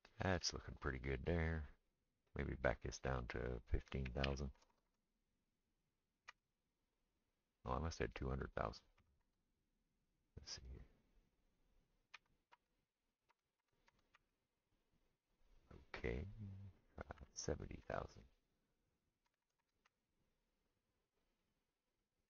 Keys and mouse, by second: 2.3 click, 2.4 middle click, 2.7-22.2 drag, 4.7 KP_0, 4.8 KP_0, 9.0 KP_2, 9.2 KP_0, 13.6 KP_0, 19.4 KP_0, 19.6 KP_0.